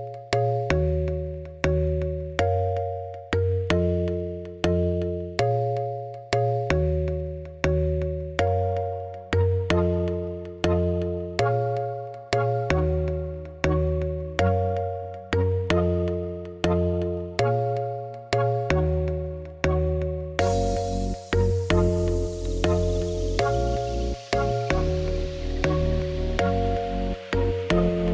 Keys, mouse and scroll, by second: 0.0-1.2 typing, 0.6 middle click, 1.6 ctrl+z, 1.7 ctrl+z, 2.4 middle click, 3.0 ctrl+r, 3.5 ctrl+r, 4.3 shift+middle click, 4.8 ctrl+r, 5.1 middle click, 5.3 scroll down 1, 5.4 shift+middle click, 5.6 2, 5.8 click, 6.0-6.5 f, 7.7-8.8 middle drag, 8.8 3, 9.1 middle click, 9.4 click, 9.6 ctrl+click, 9.8 middle click, 10.2 i, 11.9 Tab, 12.5 click, 12.8 middle click, 13.8 scroll down 1, 14.2 g, 15.3 middle click, 15.9 g, 17.3-18.5 middle drag, 19.9 shift+middle click, 20.5 shift+a, 22.7 click, 23.0 click, 23.2 Tab, 23.3 s, 24.2 Tab, 24.5 KP_1, 24.9 g, 25.3 Tab, 25.4 s, 26.6 KP_7, 27.0 Tab, 27.1 g.